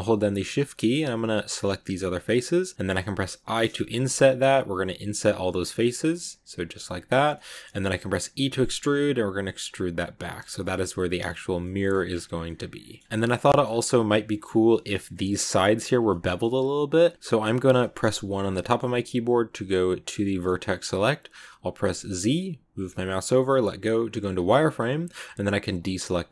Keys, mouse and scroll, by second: 0.6 shift+right click, 1.6 shift+right click, 7.2 middle click, 8.2 e, 11.1 scroll up 2, 11.2 scroll down 1, 11.3 Tab, 11.5 middle click, 12.0-12.3 scroll down 9, 12.3 middle click, 12.9 scroll up 1, 13.0 middle click, 13.5-14.1 scroll up 2, 14.1-18.1 middle drag, 18.1 1, 18.4-22.1 middle drag, 22.1 z.